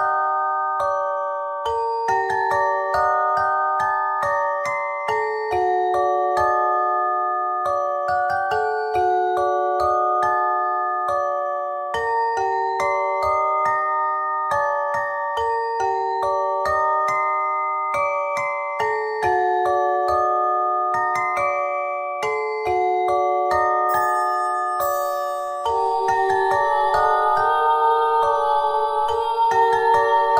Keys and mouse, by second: 1.0 Tab, 1.3 Tab, 2.8 ctrl+z, 3.0 ctrl+z, 3.1 ctrl+z, 3.2-3.9 ctrl+z, 4.0 ctrl+z, 4.2 ctrl+z, 4.4 ctrl+z, 4.5 ctrl+z, 5.1 ctrl+z, 5.4 ctrl+z, 5.7 ctrl+z, 5.9 ctrl+z, 6.2 ctrl+z, 6.5 ctrl+z, 6.7 ctrl+z, 11.1 ctrl+shift+z, 11.3 ctrl+shift+z, 11.4 ctrl+shift+z, 11.6-12.1 ctrl+shift+z, 12.3 ctrl+shift+z, 12.4 ctrl+shift+z, 12.7 ctrl+shift+z, 13.1 ctrl+shift+z, 13.3 ctrl+shift+z, 13.6 ctrl+shift+z, 13.8 ctrl+shift+z, 14.7 Tab, 15.8 ctrl+j, 16.3 Tab, 20.4 w, 23.1 ctrl+z, 28.1 ctrl+r.